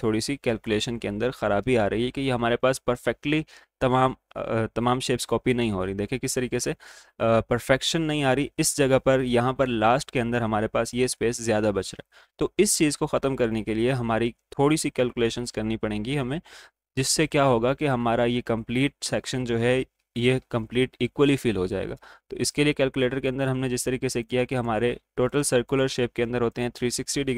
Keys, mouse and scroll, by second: 5.3 ctrl+d, 12.5 ctrl+z, 12.5 typing, 22.4 click, 22.4 typing.